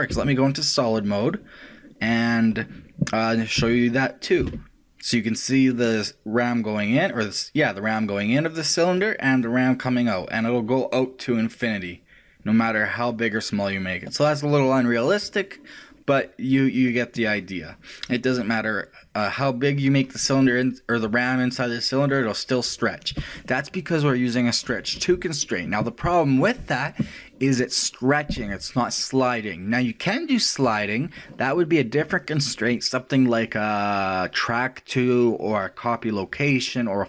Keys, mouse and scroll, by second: 0.2 z, 3.8 r, 32.0 click.